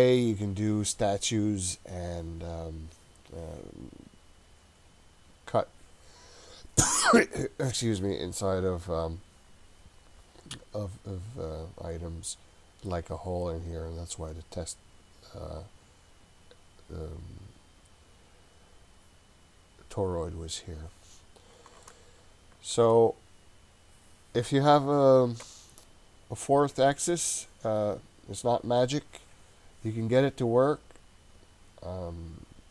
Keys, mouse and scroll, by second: 11.8-13.8 scroll up 3, 13.8-14.1 scroll down 2, 21.8-23.0 shift+middle drag, 23.3-23.9 scroll up 2, 23.9-24.7 scroll down 1.